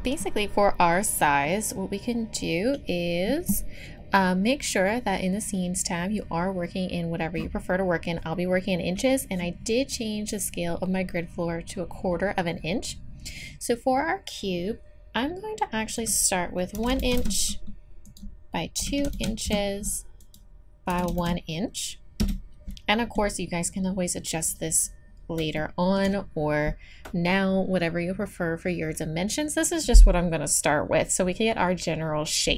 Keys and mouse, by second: 5.5-15.9 middle drag, 15.9-24.5 drag, 24.5-25.7 middle drag.